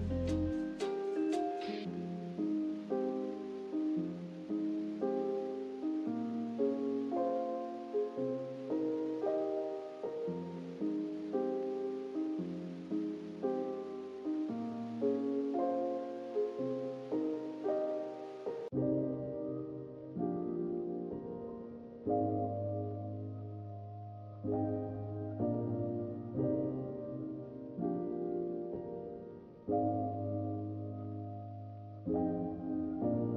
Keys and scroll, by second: 27.1 g, 29.8 z.